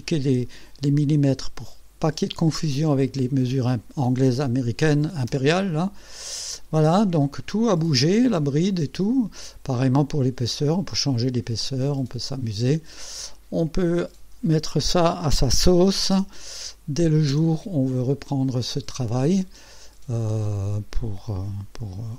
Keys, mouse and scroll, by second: 5.3 Return, 7.6-9.8 drag, 11.7-13.1 drag, 13.9 click, 15.9 KP_3, 16.2 KP_0, 17.4 KP_Enter, 20.5 click.